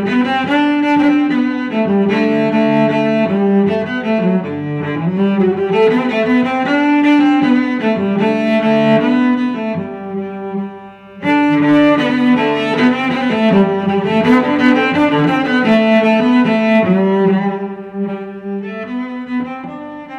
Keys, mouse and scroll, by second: 8.2 x, 18.1 middle click.